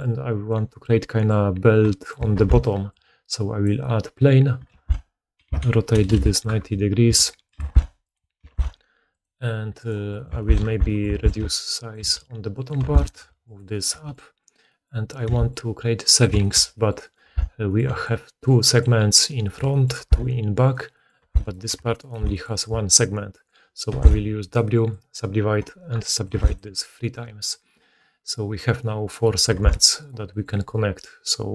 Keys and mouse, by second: 2.2 shift+a, 4.6 r, 6.3-9.7 middle drag, 7.0 s, 7.5 g, 8.3 s, 9.7 right click, 9.8-19.7 middle drag, 10.6 Tab, 11.0 alt+a, 11.3 b, 11.9 g, 12.7 Tab, 12.9 click, 13.1 g, 13.8 g, 15.2 s, 17.0 right click, 17.2 Tab, 17.8-19.4 typing, 17.9-19.7 drag, 18.9 right click, 19.9 Tab, 20.7-21.3 drag, 21.1 Tab, 21.4 shift+click, 22.0-26.5 shift+drag, 23.8 w, 25.9 middle click, 26.5-27.6 middle drag, 27.6-29.1 right drag, 27.7-29.0 middle drag, 29.1-31.5 middle drag, 29.5 Tab, 29.9 click.